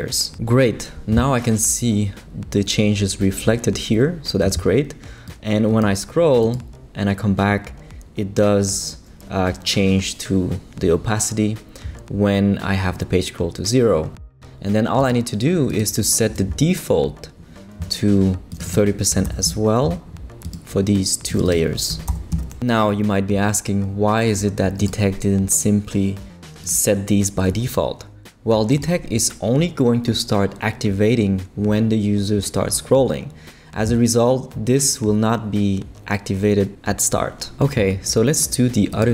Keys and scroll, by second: 18.9-19.7 typing, 21.7-22.6 typing.